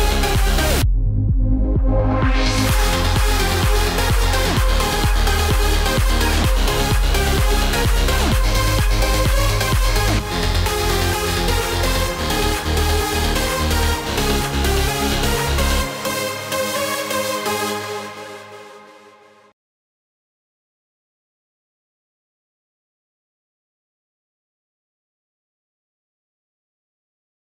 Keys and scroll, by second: 6.2 ctrl+shift+i, 10.0 alt+BackSpace, 11.7 ctrl+d, 17.2 F10.